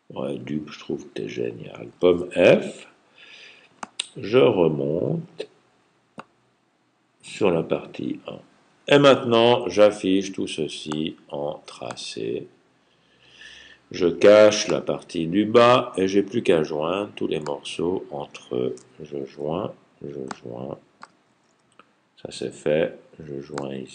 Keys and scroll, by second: 2.0 super+f, 19.2 super+j, 21.1 super+j.